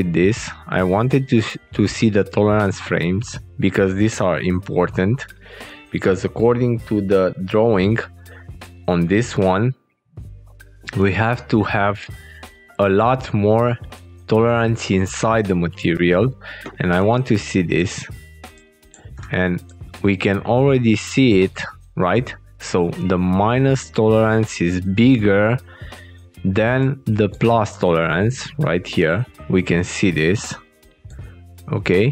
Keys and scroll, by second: 6.3 alt+Tab, 15.9 alt+Tab.